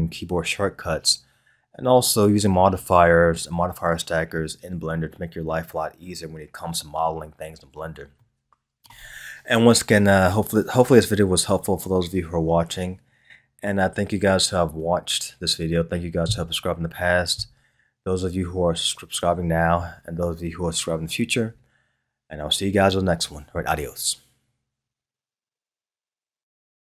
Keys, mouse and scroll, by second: 8.3-11.3 middle drag.